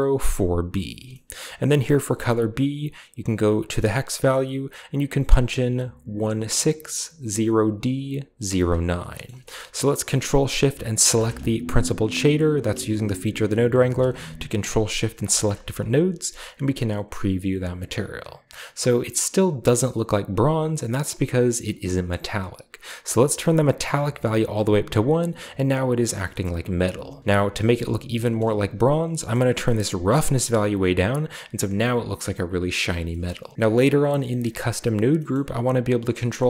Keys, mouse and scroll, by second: 1.1-2.0 middle drag, 2.0 click, 3.9 click, 8.8-10.0 scroll down 2, 9.0-10.0 ctrl+shift+middle drag, 10.9-12.6 ctrl+shift+drag, 12.8-13.5 ctrl+shift+drag, 13.7-15.0 ctrl+shift+drag, 15.1 ctrl+shift+click, 15.9-21.1 scroll down 1, 21.1-23.2 scroll up 1, 23.2-25.1 drag, 25.6-27.1 scroll down 1, 27.2-27.8 shift+scroll up 1, 27.8 shift+middle drag, 27.8-29.4 scroll down 1, 28.3-29.4 middle drag, 29.4-32.8 drag, 32.0-32.8 scroll down 1, 32.8-33.5 scroll down 1, 33.1 middle click, 33.3 a, 33.7-35.0 drag, 35.2-35.5 middle drag, 35.2-36.4 scroll up 1.